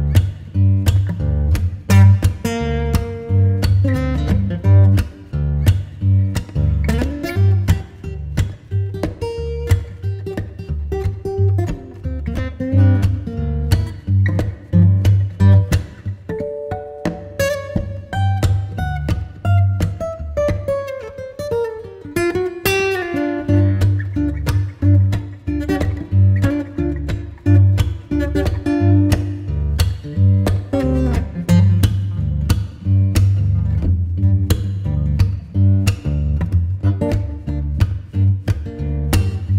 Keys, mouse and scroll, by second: 0.6 Return, 1.3 click, 2.0 scroll down 1, 2.3 scroll up 1, 2.4 right click, 3.5-3.9 scroll up 1, 4.5 ctrl+shift+click, 5.0-5.4 scroll up 1, 10.6 click, 10.8 right click, 11.6 Tab, 12.2 scroll down 1, 12.4 scroll up 1, 12.6 right click, 13.0 scroll down 1, 13.2 scroll up 1, 13.4 right click, 13.9 Tab, 14.9 Tab, 16.7 ctrl+shift+click, 20.2 typing, 20.9 Return, 22.2 click, 22.5 right click, 22.8 Tab, 26.8 scroll up 1, 27.1 right click, 27.7 click, 29.7 scroll down 1, 29.9 scroll up 1, 30.5 ctrl+shift+click, 37.8 click, 38.7 ctrl+shift+click.